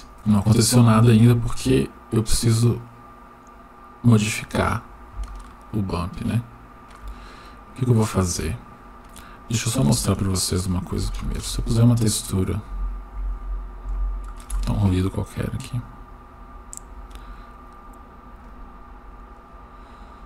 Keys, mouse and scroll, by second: 1.1 click, 1.9-4.4 drag, 5.4-7.0 shift+middle drag, 6.8 shift+scroll up 1, 7.3 scroll down 1, 9.8 shift+a, 13.3 Down, 16.7-18.4 drag.